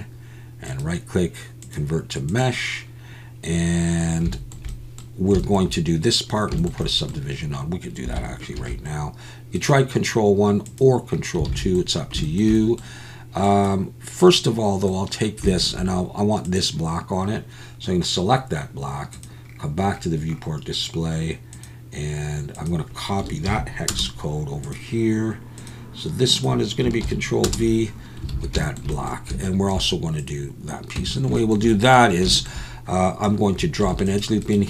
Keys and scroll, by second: 8.6 ctrl+1, 11.5 alt+a, 28.3 alt+a, 31.0 Tab, 33.8 ctrl+r.